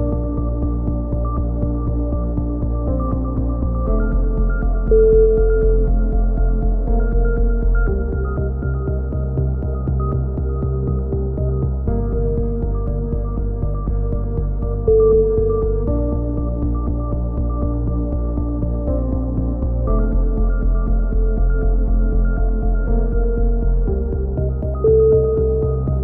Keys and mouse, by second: 1.2 a, 1.4 Tab, 1.7-2.3 middle drag, 3.7 KP_3, 4.1 Tab, 5.6 z, 7.3 click, 7.8 z, 7.9 z, 9.0-9.8 right drag, 9.8 g, 11.4 a, 11.4 middle drag, 11.6-12.6 drag, 14.6 k, 16.7-17.3 right drag, 16.7 x, 17.3 a, 17.8-18.3 middle drag, 20.0 KP_3, 20.2 Tab, 20.2-20.5 middle drag, 20.5 click, 23.6-24.9 drag, 23.9 Tab, 25.2-26.0 drag.